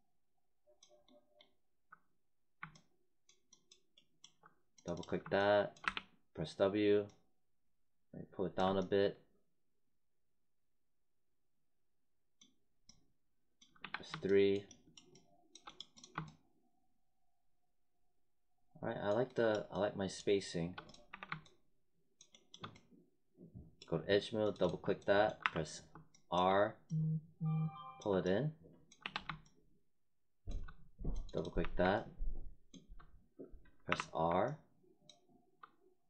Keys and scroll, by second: 5.8 w, 13.8 3, 21.0 1, 25.3 r, 29.0 3, 31.5 1, 33.8 r.